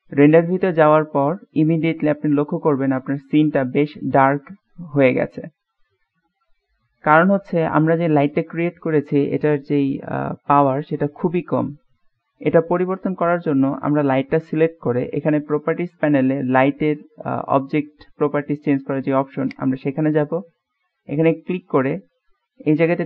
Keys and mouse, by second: 0.9-1.5 middle drag, 2.4-7.3 middle drag, 7.7 middle click, 19.7 click.